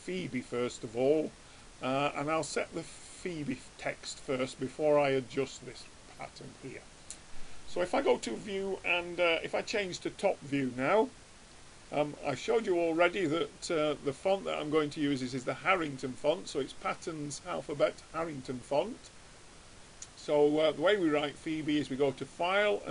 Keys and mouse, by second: 1.0 click, 1.7-3.6 middle drag, 2.2 click, 2.2 right click, 8.2-10.0 drag, 12.0 click, 17.0-21.0 middle drag, 21.0-22.9 drag.